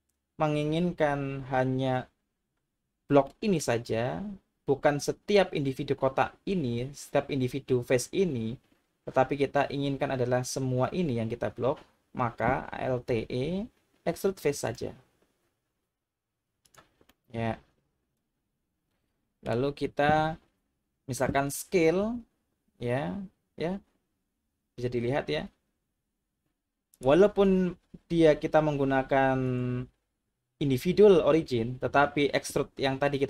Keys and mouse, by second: 3.4 middle click, 13.1 alt+e, 16.7 click, 17.1-19.4 middle drag, 22.1 s, 26.9-28.9 drag, 29.6-31.5 drag.